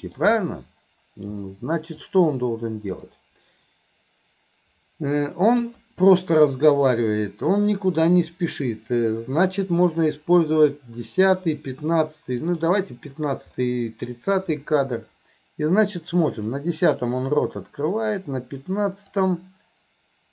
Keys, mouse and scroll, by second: 1.5-2.0 middle drag, 3.1-5.7 drag, 12.5 click, 13.7 middle click, 16.6-19.2 drag.